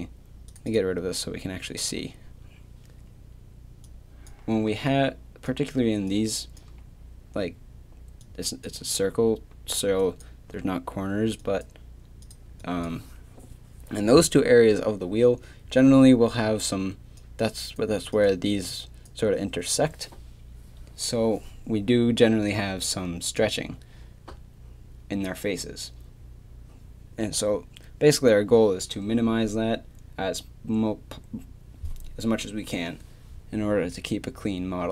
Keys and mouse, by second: 0.7-7.9 drag, 4.7 d.